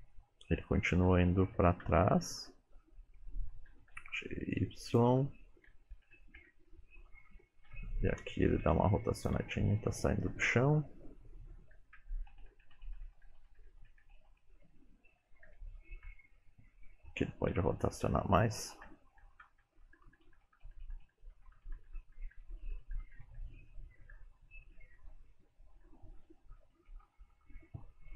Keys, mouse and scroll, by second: 1.5 Left, 1.9 Left, 2.2 Right, 2.6 Right, 3.8 g, 6.0 Right, 6.5 Right, 7.8 Right, 8.7 r, 9.4 g, 11.6 Left, 11.8 Left, 12.0 Left, 12.4 Right, 12.6 Right, 12.8 Right, 13.0 Right, 13.2 Right, 13.5 Right, 13.7 Right, 13.9 Right, 14.1 Right, 14.4 Right, 14.6 Right, 15.3 Left, 15.5 Left, 16.1 Left, 17.5 r, 19.1 Left, 19.3 Left, 19.5 Left, 19.7 Left, 19.9 Right, 20.1 Right, 20.3 Right, 20.5 Right, 20.7 Right, 20.9 Right, 21.1 Right, 21.3 Right, 21.5 Right, 21.7 Right, 22.0 Right, 22.1 Right, 22.3 Right, 22.5 Right, 22.7 Right, 22.9 Right, 23.1 Right, 23.3 Right, 24.2 Left, 25.1 Left, 25.4 Left, 25.9 Left, 26.3 Right, 26.7 Right, 27.0 Right.